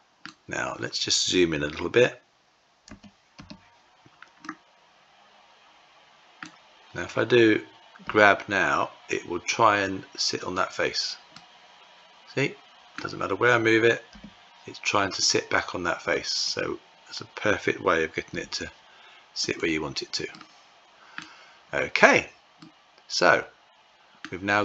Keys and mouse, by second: 2.3 q, 3.8-5.9 middle drag, 7.5 g, 10.8-12.4 middle drag, 13.5 g, 17.7 g, 19.7-20.6 middle drag, 22.0-23.6 middle drag.